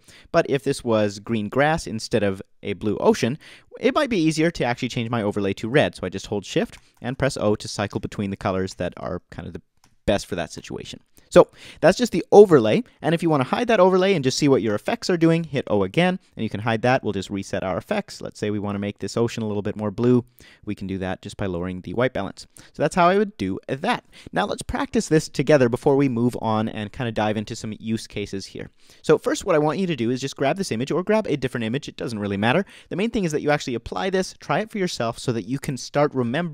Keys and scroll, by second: 6.7 shift+o, 14.7 shift+o, 15.2 o, 27.1 BackSpace.